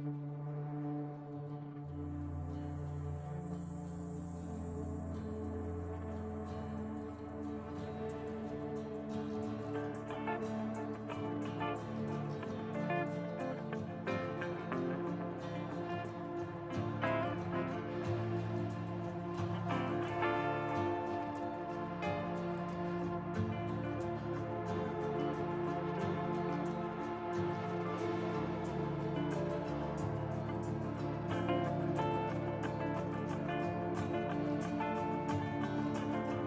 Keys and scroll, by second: 5.8 ctrl+r, 9.5 Tab, 12.1 Tab, 28.4 Tab, 29.3 ctrl+r, 33.4 ctrl+r.